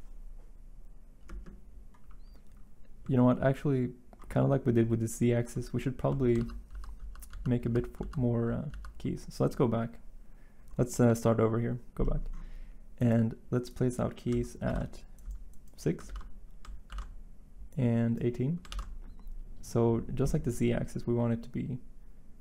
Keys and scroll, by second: 6.4 ctrl+z, 6.7 ctrl+z, 7.0 ctrl+z, 14.6 ctrl+c, 16.8 ctrl+v, 18.6 ctrl+v.